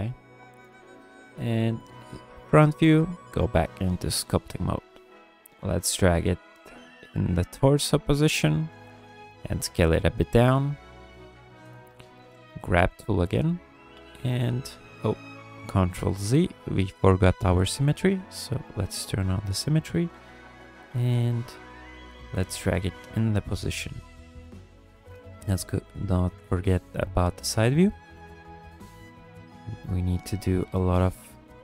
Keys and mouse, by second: 0.4 KP_1, 1.1-1.6 shift+drag, 2.8-3.5 drag, 4.1 shift+click, 4.6 shift+click, 6.2 shift+click, 8.9 ctrl+click, 9.5 s, 11.4 ctrl+click, 11.8 shift+click, 12.2 g, 12.5 f, 13.4 click, 14.8 ctrl+z, 17.4 click, 18.2 f, 18.6-20.0 drag, 20.9 f, 21.8-23.5 drag, 24.0 click, 25.3 KP_3, 26.6 shift+click, 27.0 f, 28.0-29.9 drag, 30.2 f, 31.1 click.